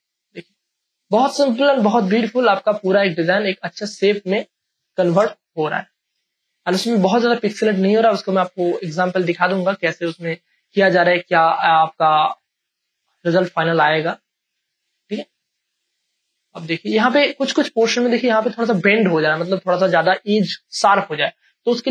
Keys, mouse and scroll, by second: 1.0 space, 1.5-4.5 ctrl+drag, 5.0 space, 5.8 alt+click, 6.1 space, 6.3-9.9 ctrl+drag, 9.9 space, 10.3-15.0 ctrl+drag, 15.0 ctrl+space, 15.2 ctrl+click, 17.0 space, 17.2 click, 17.5 space.